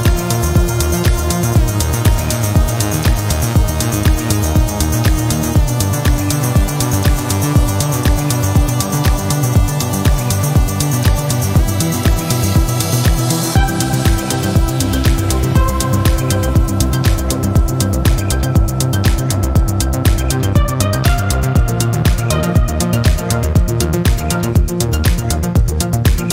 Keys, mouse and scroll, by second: 0.1 click, 2.0 click, 3.3 click, 4.4 click, 5.8 click, 6.7 click, 7.1 click, 7.7 click, 9.5 click, 11.5 click, 13.0 click, 15.8 scroll down 2, 16.6-18.0 scroll down 6, 21.2 click, 22.3-22.7 scroll down 2, 23.1 click, 24.3 click, 24.7 right click, 26.2 click.